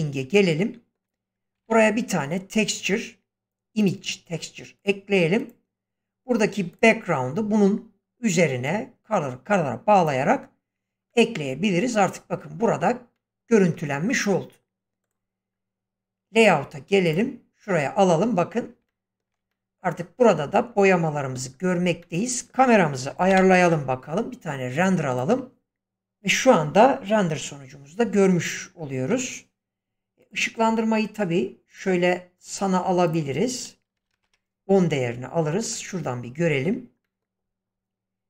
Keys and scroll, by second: 1.5 shift+a, 23.3 alt+0, 29.1 Escape, 33.9 typing, 34.2 Return.